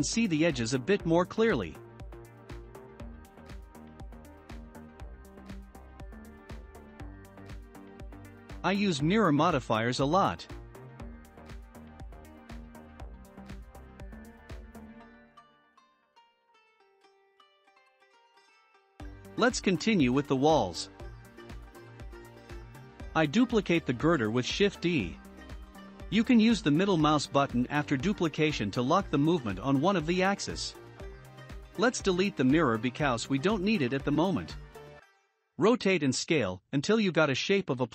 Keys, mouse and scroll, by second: 0.7-3.9 shift+middle drag, 4.0-5.8 drag, 7.7-8.8 drag, 9.5 click, 11.9-14.5 shift+middle drag, 14.5 click, 15.4 click, 16.2 click, 16.7 scroll down 2, 17.3 scroll down 1, 17.3-22.5 shift+middle drag, 22.5 shift+a, 24.9-25.4 drag, 25.4-26.9 shift+middle drag, 26.9 shift+d, 29.8-30.7 drag, 30.7-32.5 middle drag, 32.5 r, 37.7 scroll up 1.